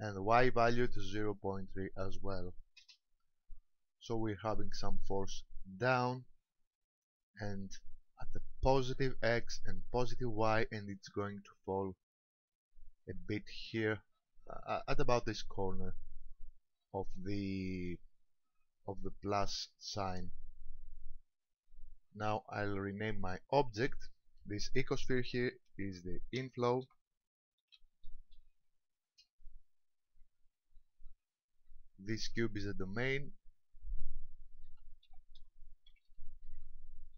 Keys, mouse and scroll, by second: 0.3 click, 16.7-17.2 scroll down 1, 17.2 middle click, 17.2 scroll down 1, 23.9 ctrl+click, 31.0 click, 33.5 ctrl+click.